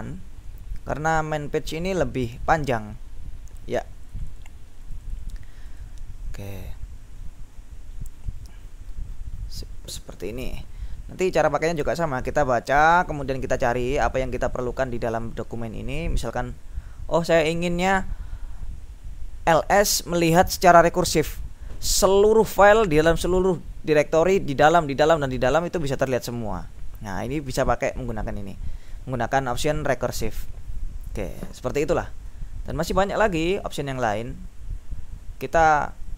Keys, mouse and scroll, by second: 1.0-1.7 scroll down 3, 1.8-2.4 scroll down 2, 4.2-6.4 drag, 7.3 scroll down 2, 7.6-10.9 scroll up 4, 12.9 click, 13.2-16.2 scroll down 1, 16.6-17.4 scroll up 1, 28.0-30.2 drag, 31.2 click, 32.3-34.0 scroll down 3, 34.0-34.6 scroll up 3.